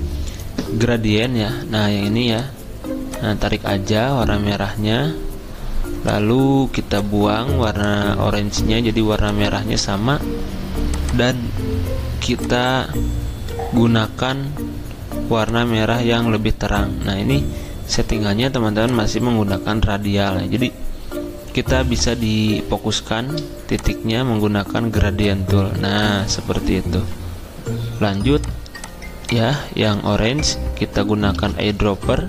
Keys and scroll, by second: 31.3 i.